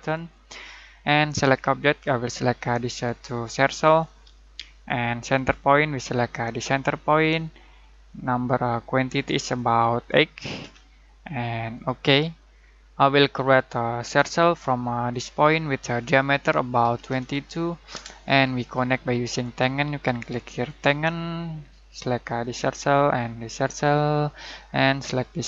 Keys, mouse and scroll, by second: 1.1 click, 2.9 click, 6.1 click, 9.8-10.1 click, 10.6 8, 11.7 click, 14.0 c, 15.1 click, 17.0 typing, 18.0 Return, 20.6 click.